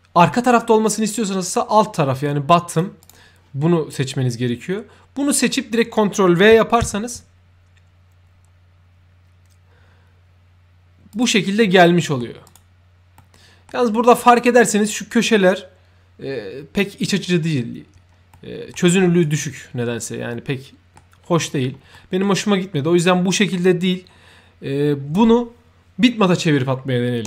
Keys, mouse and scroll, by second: 2.6 click, 2.9 click, 5.5 scroll up 1, 5.9-6.3 right drag, 6.9 ctrl+v, 11.0 click, 11.1 v, 11.6 middle click, 12.4 right click, 13.1 middle click, 14.1-14.5 right drag, 18.3 middle click, 18.8-19.1 right drag, 20.3 middle click, 21.1-21.4 scroll up 1, 21.9 middle click, 22.9-25.0 drag.